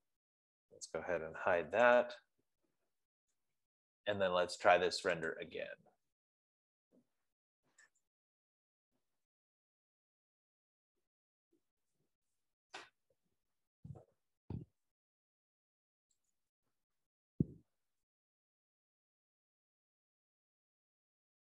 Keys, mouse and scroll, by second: 1.5-2.5 typing, 5.5 click, 6.1 click, 8.4 click, 14.9 F15, 17.0-21.5 drag.